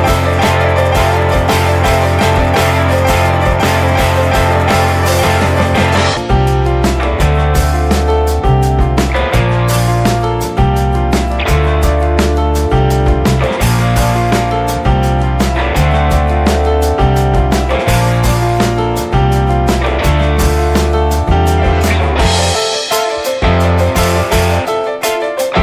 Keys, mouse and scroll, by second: 1.2 click, 1.4 alt+middle click, 2.6 s, 3.5 s, 7.6-8.7 shift+middle drag, 9.1-9.4 scroll up 2, 9.4-10.5 shift+middle drag, 10.5 drag, 10.9 middle drag, 11.1 alt+z, 11.4-16.9 middle drag, 18.8 click, 20.3 click, 20.8 scroll up 2, 21.0-21.5 middle drag, 21.5-22.7 scroll down 9, 22.7 click, 22.8 `, 23.7 /, 24.0-25.6 middle drag.